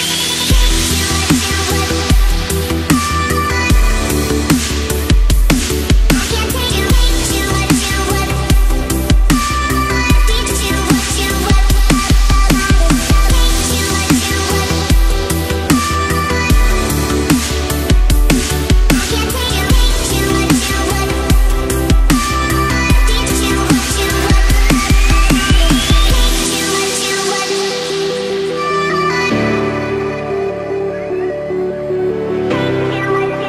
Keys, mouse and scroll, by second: 0.4 Down, 10.0 click, 11.3 Up, 11.9 Right, 12.7 Up, 13.5 click, 14.6-15.7 typing, 16.4 click, 16.6 Down, 17.0 Left, 17.4 Right, 18.4 click, 18.8 space, 19.0 click, 19.2 space, 20.0 click, 21.8-23.4 alt+drag, 23.6 Right, 24.1 Up, 24.7 Right, 25.1 Down, 25.3 Left, 26.1-28.8 alt+drag, 30.1 space, 30.2-30.7 click, 30.5 space, 31.1-33.4 drag.